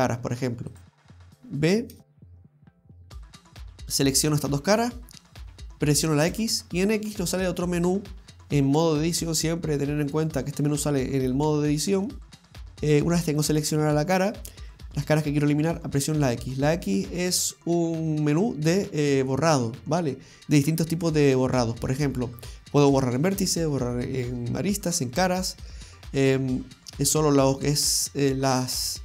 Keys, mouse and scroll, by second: 0.7 click, 2.3 b, 6.3 x, 16.2 x.